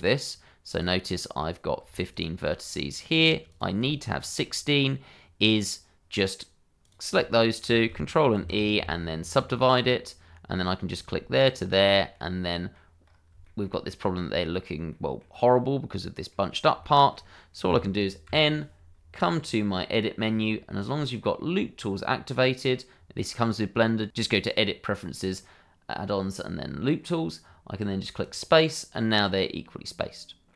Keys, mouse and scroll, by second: 1.1 middle click, 1.6 scroll down 1, 2.1 ctrl+click, 3.5 click, 4.2 ctrl+click, 6.8 click, 7.3 shift+click, 8.4 ctrl+e, 9.6 click, 11.7 ctrl+click, 12.1 middle click, 13.0 scroll up 1, 13.4 shift+middle click, 14.9 middle click, 18.2 n, 19.9 click, 24.1 middle click, 28.2 click, 28.9-29.2 scroll down 1, 29.2 middle click.